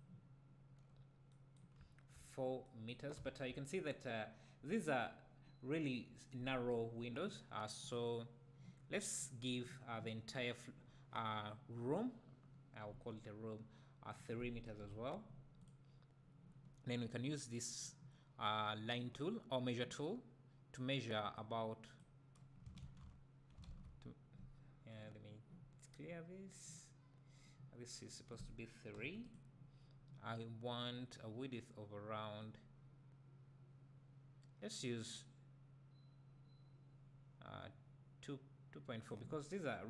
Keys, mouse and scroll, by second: 0.7-1.3 scroll down 2, 1.8 `, 3.2 `, 7.8 click, 14.1-15.6 drag, 17.0 click, 21.3-21.8 drag, 22.8 ctrl+z, 23.0 ctrl+z, 23.8 z, 28.3-29.3 drag, 32.4 click.